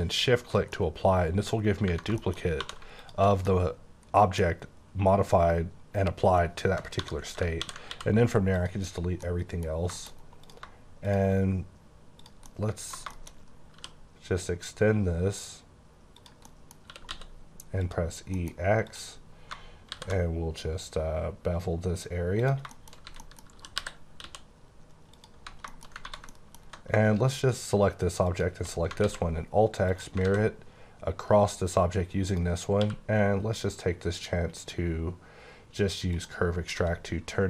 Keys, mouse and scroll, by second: 0.1 shift+click, 0.9 middle click, 1.6 scroll up 1, 1.8 Right, 2.2 shift+middle click, 2.3 shift+scroll up 2, 2.6 2, 2.9 alt+click, 3.4 middle click, 4.5 scroll up 1, 7.0 1, 7.5 |, 7.9 x, 8.5 click, 9.0 scroll down 2, 9.1 middle click, 10.3 click, 11.9 scroll up 1, 12.1 click, 12.4 middle click, 13.3-13.7 shift+scroll up 3, 13.7 g, 16.2 click, 16.4 middle click, 17.1 e, 17.8 click, 18.1 scroll down 1, 18.3 middle click, 18.9 click, 19.3 scroll up 1, 19.9 b, 21.3-22.3 scroll up 2, 22.3 click, 22.7 shift+middle click, 22.9 scroll down 1, 23.0-24.2 typing, 23.2 middle click, 25.1 click, 25.4 Tab, 25.4-26.0 scroll down 4, 25.7 shift+middle click, 26.0 ctrl+1, 26.3 middle click, 28.3 click, 29.0 alt+x, 30.0 click, 30.2 alt+a, 32.3 click, 32.7 q, 36.0 click, 36.7 s.